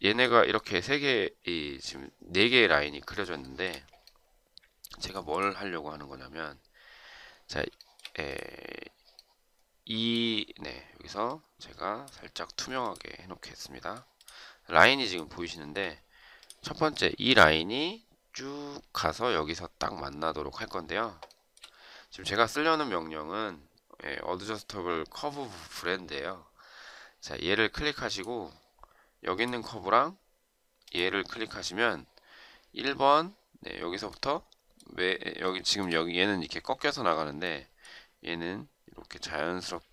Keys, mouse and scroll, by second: 3.2 shift+right click, 7.6 shift+right click, 15.3 shift+right click, 21.1 shift+right click, 35.3 shift+right click.